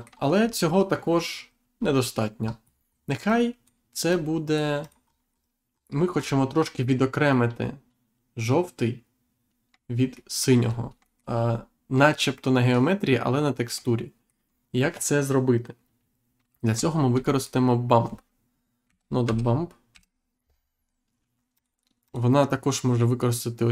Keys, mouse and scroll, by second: 0.4-0.8 scroll down 1, 2.3-2.7 scroll down 1, 2.9 scroll down 1, 3.2 click, 4.1 click, 5.0 scroll up 1, 5.7-6.4 scroll up 2, 6.8 shift+middle click, 10.1 shift+middle click, 10.7 scroll down 1, 11.0 shift+middle click, 11.3-11.7 scroll up 1, 13.8 shift+middle click, 14.6-15.0 scroll up 1, 16.9 shift+a, 17.3 click, 18.8 b, 19.9 m, 21.5 click.